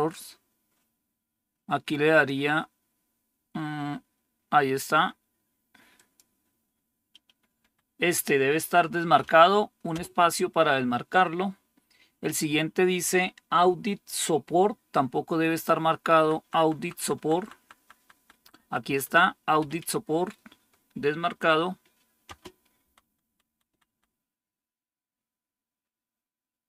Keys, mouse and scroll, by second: 7.5 Down, 9.8 space, 16.1 Down, 16.3 Down, 16.7 Down, 16.9 Down, 17.1 Down, 17.3 Down, 17.5 Down, 17.7 Down, 17.9 Down, 18.1 Down, 18.2 Down, 18.5 Down, 18.8 Down, 19.5 Up, 19.9 Up, 22.1 space, 22.7 Down, 23.1 Down, 23.4 Down, 23.6 Down, 23.8 Down.